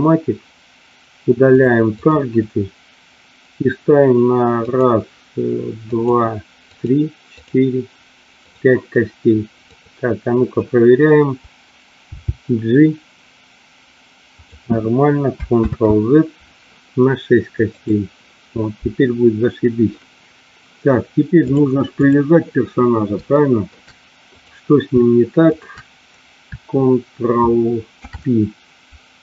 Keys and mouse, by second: 1.4 click, 2.0 click, 4.7 click, 5.9 click, 6.7 click, 7.2 click, 8.3 click, 9.6 click, 14.4 click, 15.6 ctrl+z, 17.7 click, 21.4 click, 23.4 shift+middle click, 24.4 click, 27.9 ctrl+p.